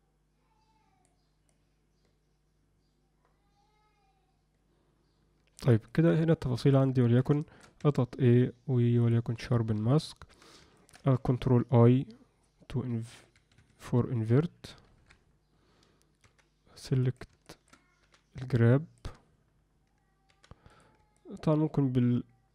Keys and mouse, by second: 1.5-5.6 drag, 5.9 ctrl+alt+click, 6.0 ctrl+alt+middle click, 6.3 alt+middle click, 7.0 ctrl+alt+middle click, 7.4 shift+middle click, 7.8 a, 10.0 alt+middle click, 10.7 ctrl+middle click, 15.0 ctrl+i, 16.2 f, 17.5 alt+shift+middle click, 18.0 g, 18.5 alt+middle click, 20.3 f, 21.1 middle click.